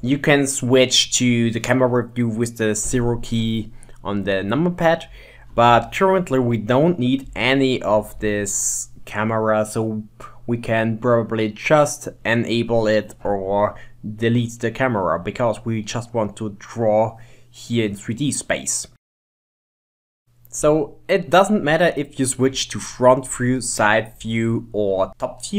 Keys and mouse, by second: 1.6 ctrl+middle click, 2.9 KP_0, 5.3 shift+middle click, 5.6-9.1 ctrl+middle drag, 10.2-11.2 middle drag, 12.1 click, 15.9-16.9 middle drag, 18.3 middle click, 19.4-21.8 middle drag, 21.8 KP_1, 23.3 KP_3, 24.8 KP_8, 25.1 KP_7.